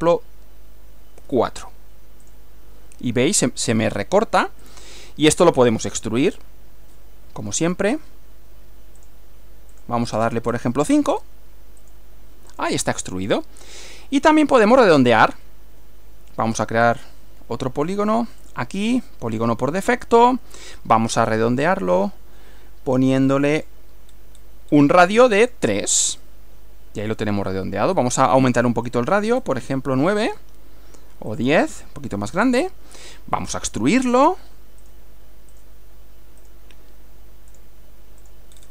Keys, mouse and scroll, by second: 1.2 4, 2.3 click, 4.7 click, 5.4 click, 6.3 click, 7.7 click, 9.0 click, 9.8 click, 11.2 scroll up 2, 11.8 click, 12.6 click, 13.0-14.0 middle drag, 14.7 click, 15.2 click, 16.9 click, 18.4 click, 20.2 click, 21.8 click, 23.6 click, 24.1 scroll up 1, 24.7 scroll up 1, 25.4 click, 28.0-28.6 drag, 28.9 click, 29.4 scroll up 2, 30.3 click, 31.4 click, 32.4 click, 34.0 click, 34.8 click, 35.6 click, 36.4 click, 37.6 click, 38.2 click.